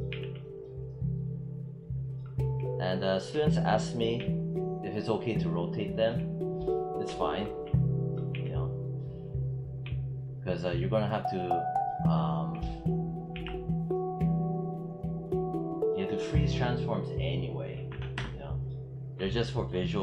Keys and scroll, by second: 2.2 e, 4.0 j, 8.2 z, 9.7 j, 13.2 ctrl+z, 17.6 9, 18.0 Return.